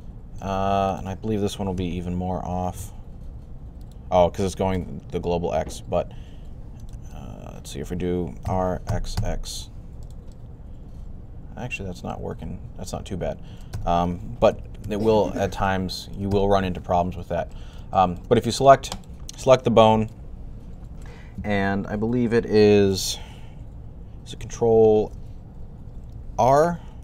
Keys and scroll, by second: 1.6-2.6 typing, 4.6 typing, 8.0-9.5 typing, 14.1 super+z, 14.4 super+z, 14.7 super+z, 25.0 ctrl+n, 26.3 ctrl+r.